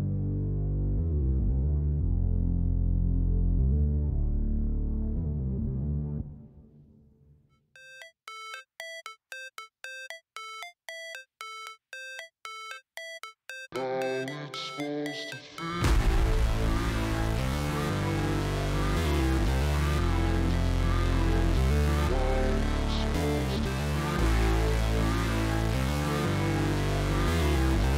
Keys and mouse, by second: 0.7 click, 4.0-5.1 drag, 7.4 click, 9.7-11.0 drag, 13.0 click, 14.8 click, 17.8-19.0 drag, 22.1-23.5 drag, 24.7 click, 25.4 click, 26.8 click, 27.8 ctrl+shift+click.